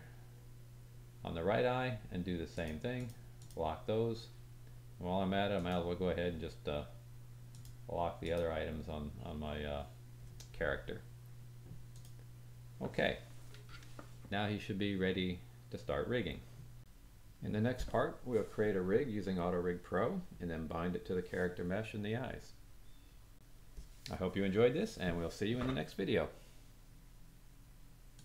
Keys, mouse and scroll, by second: 2.5 middle click, 2.5 right click, 3.3 click, 5.5 click, 8.2 click, 11.9 click, 14.7 click.